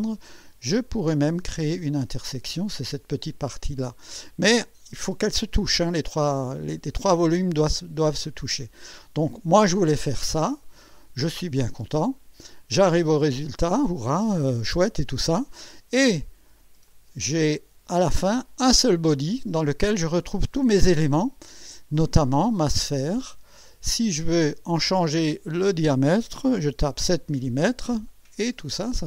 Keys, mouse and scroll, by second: 0.7 click, 1.8 click, 2.8 click, 3.6 click, 7.3 click, 8.3 click, 9.5-11.3 drag, 11.9 click, 13.0-15.6 drag, 16.9 click, 17.5 click, 21.0 click, 22.2 click, 23.2 click, 25.2 click, 26.8 KP_7, 27.3 KP_Enter, 28.7-29.0 drag.